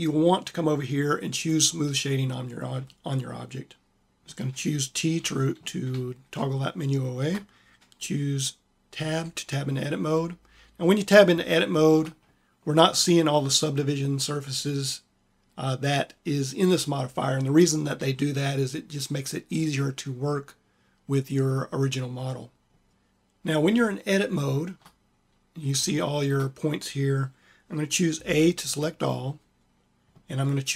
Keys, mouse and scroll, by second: 4.0 t, 5.0 t, 8.9 Tab, 17.8 a, 23.5 click, 28.0 a.